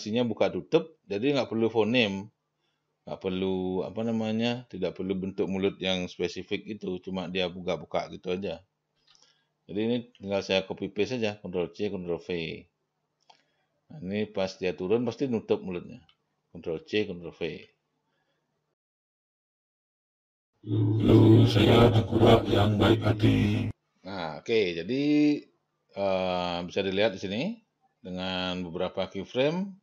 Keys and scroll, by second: 9.4 ctrl+c, 10.2 ctrl+v, 17.2 ctrl+c, 17.8 ctrl+v, 18.9 ctrl+v, 19.0 ctrl+c, 19.2 ctrl+v, 20.0 ctrl+v, 20.2 0, 20.3 Delete, 20.4 ctrl+v, 23.7 0.